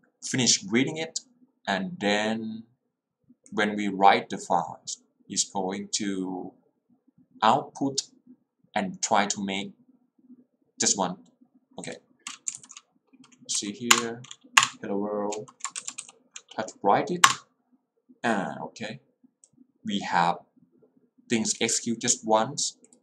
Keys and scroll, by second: 12.7 alt+l, 13.6 Up, 14.0 Return, 16.0 w, 17.3 Return.